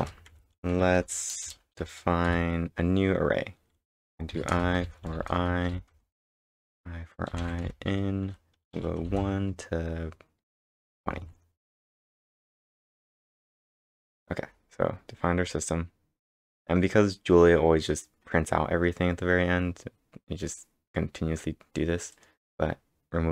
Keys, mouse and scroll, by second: 0.0 Return, 0.3-2.3 typing, 4.1-9.1 typing, 10.7-12.8 typing, 11.7 Right, 11.9 ctrl+Return, 14.9 scroll down 3, 14.9 b, 15.4 scroll up 3, 16.6 scroll up 1, 18.6 scroll down 1, 19.1 scroll up 1, 20.6-21.3 typing, 21.5 scroll down 1, 22.1 click, 22.6 scroll up 2, 23.2 scroll down 1.